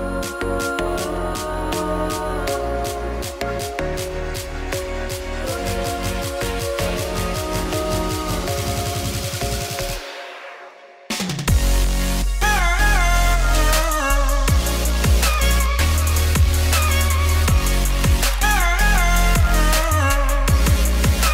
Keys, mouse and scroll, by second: 0.9 click, 1.3-3.0 shift+middle drag, 3.0 click, 13.0-18.0 drag, 20.8 KP_0, 21.2 z.